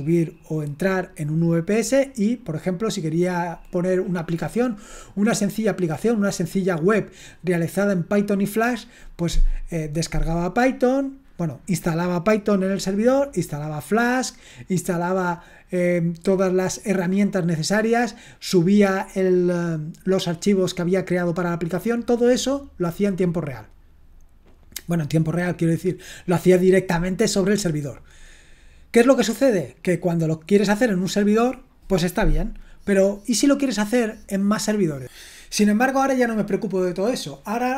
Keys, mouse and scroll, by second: 34.9 click.